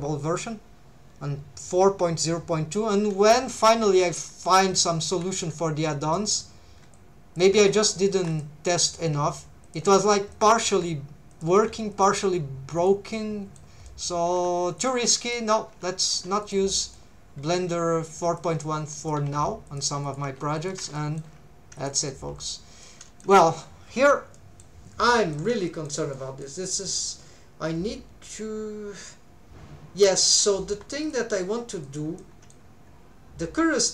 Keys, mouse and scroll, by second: 3.1 shift+middle click, 3.8 alt+a, 4.6 c, 6.3 right click, 7.0 click, 7.5 1, 8.2 1, 8.3 click, 8.8 click, 9.1 g, 9.6 shift+click, 10.3 click, 10.7 r, 11.3 click, 11.5 g, 11.9 shift+click, 12.8 click, 13.1 middle click, 13.9 middle click, 14.3 g, 14.8 shift+click, 15.2 click, 16.4 click, 16.7 middle click, 17.7 r, 18.2 click, 19.0 click, 19.2 g, 19.7 shift+click, 20.0 click, 20.2 g, 20.6 shift+click, 21.0 shift+middle click, 21.8 click, 22.1 middle click, 22.8 middle click, 24.3 middle click, 25.1 middle click, 25.7 shift+middle click, 26.1 middle click, 26.9 middle click, 29.7 middle click, 31.0 click, 31.8 click, 32.2 middle click.